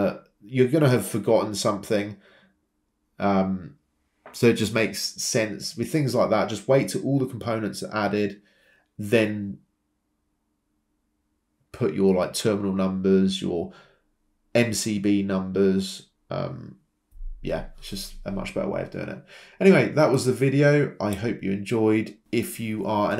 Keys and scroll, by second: 6.2-7.1 typing, 11.6-12.4 typing.